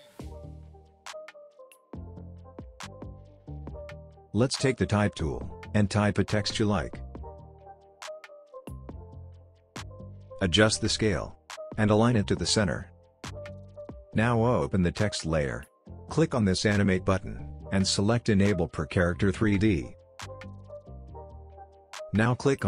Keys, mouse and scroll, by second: 0.0-0.2 typing, 2.2 click, 3.4-3.8 scroll down 1, 3.8-4.9 scroll up 1, 4.9 click, 6.5-8.1 typing, 9.6 click, 13.4-14.8 scroll down 1, 14.8 click, 21.4 click.